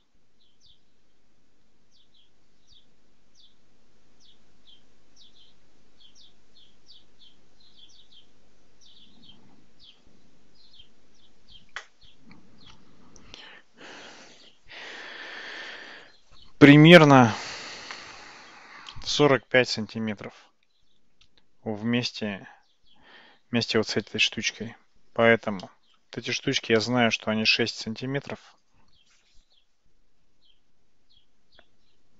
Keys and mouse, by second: 25.7 shift+middle click, 26.8-27.8 shift+middle drag.